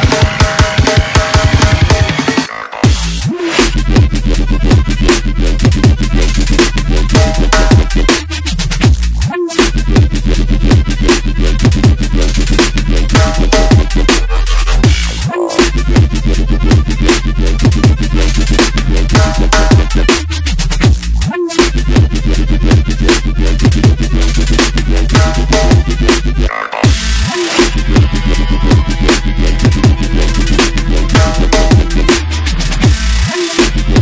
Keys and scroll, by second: 10.1 e, 10.8 ctrl+BackSpace, 11.3 ., 11.4 ., 11.5 ., 20.0 ctrl+u, 21.3 ctrl+c, 28.8 ctrl+g, 32.6 n.